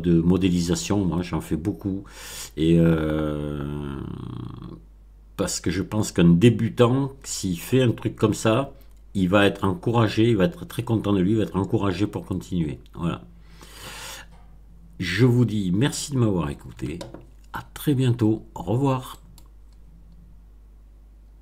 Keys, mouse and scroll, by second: 19.0 right click, 19.1 middle click.